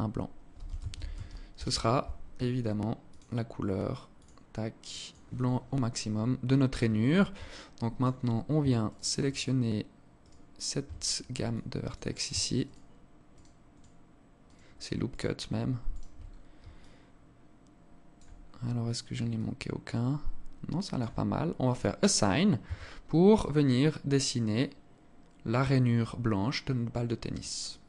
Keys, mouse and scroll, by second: 2.7 click, 5.7-6.1 scroll up 3, 7.0 alt+click, 8.5 alt+shift+right click, 8.9 alt+shift+right click, 11.1 alt+shift+right click, 11.1 alt+click, 12.3 alt+shift+right click, 12.9 alt+shift+right click, 13.5 alt+shift+right click, 14.1 alt+shift+right click, 14.8 alt+shift+right click, 15.5 alt+shift+right click, 15.9-16.2 scroll down 5, 16.3 alt+click, 18.0-18.5 scroll up 5, 18.9 alt+click, 21.3 click, 21.8 scroll down 3, 22.3 Tab, 22.5 scroll down 2, 23.1 alt+click, 27.4 alt+click.